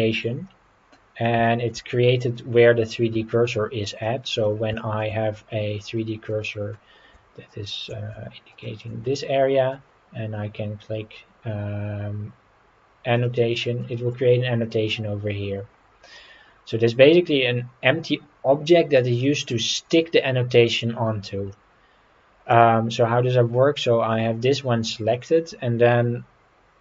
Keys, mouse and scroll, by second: 0.4-1.2 middle drag, 1.4 shift+middle click, 4.0-4.3 middle drag, 4.7 shift+middle drag, 5.5-5.8 scroll up 3, 6.3-6.7 middle drag, 8.5 shift+right click, 9.1-9.7 middle drag, 13.1 click, 13.8-14.1 middle drag, 15.6-16.1 scroll up 4, 16.1-16.9 middle drag, 21.5-22.5 middle drag.